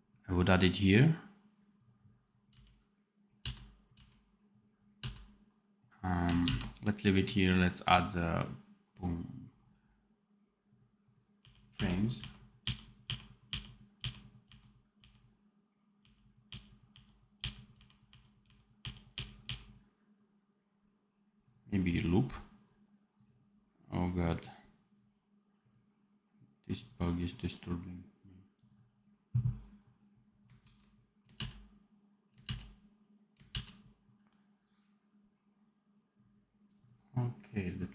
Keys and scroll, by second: 2.4 x, 3.3 v, 3.8 x, 4.9 v, 6.4 ctrl+s, 11.3 r, 12.6 r, 13.4 r, 17.3 r, 30.5 ctrl+c, 31.2 ctrl+v.